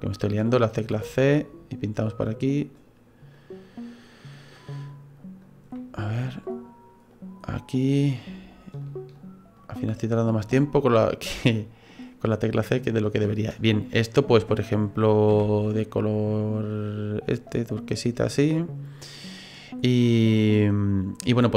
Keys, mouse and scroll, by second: 0.1 click, 0.9 c, 7.4 middle click, 8.8 shift+right click, 9.2 shift+right click, 9.6 shift+right click, 10.0 shift+right click, 10.6 middle click, 11.5 middle click, 12.3 middle click, 13.2-13.8 scroll down 1, 13.8 middle click, 15.3 g, 17.9 right click, 18.2 scroll down 2, 18.5 middle click, 19.5 scroll down 2, 19.8 middle click.